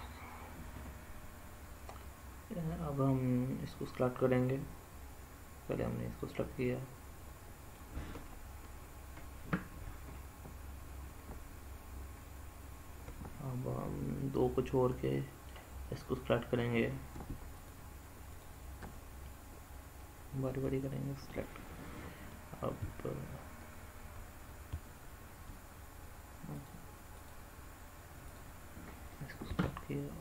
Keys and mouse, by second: 5.5-7.4 middle drag, 14.2 middle click, 18.6 middle click, 19.6 middle click, 24.3-25.1 e, 26.2 click, 26.8 click, 29.1-30.2 Return, 30.1 click.